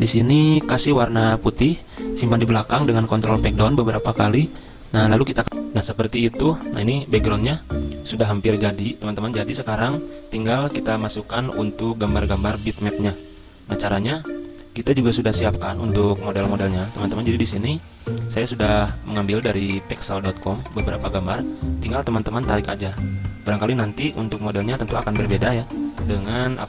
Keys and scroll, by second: 2.6 ctrl+Page_Down, 2.7 ctrl+Page_Down, 2.8 ctrl+Page_Down, 4.5 ctrl+Page_Up, 4.7 ctrl+Page_Up, 5.4 F9.